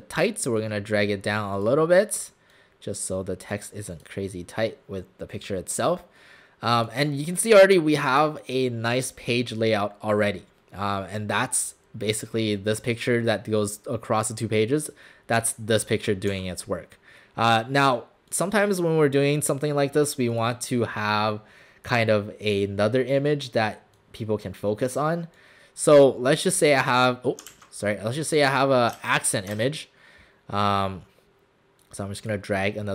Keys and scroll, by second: 16.4 w, 27.5 ctrl+z, 29.0 ctrl+z, 29.6 alt+Tab.